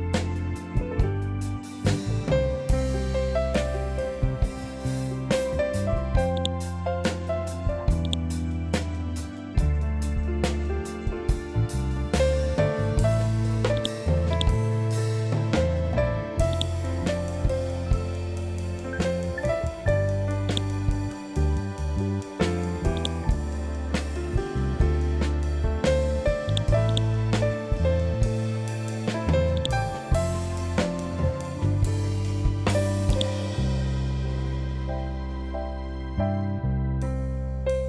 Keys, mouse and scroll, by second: 5.8-13.2 drag, 14.1 scroll down 1, 16.0 scroll up 1, 16.0-19.9 drag, 19.9 right click, 25.9 click, 26.3 right click, 29.0 click, 32.6-37.8 drag.